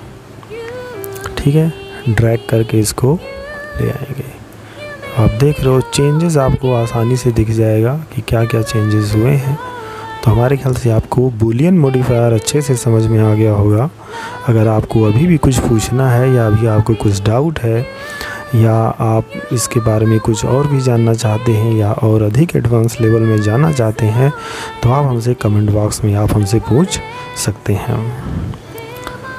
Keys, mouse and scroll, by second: 3.3 middle click, 5.9 middle click.